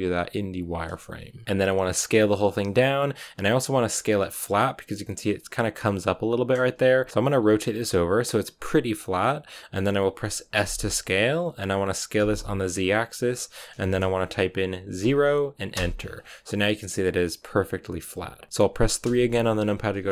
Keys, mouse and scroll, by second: 1.8 s, 5.8-7.1 scroll up 2, 7.1 r, 10.5 s, 15.9-16.2 scroll down 5, 16.2-18.5 middle drag, 18.5 KP_3, 20.0 shift+middle click.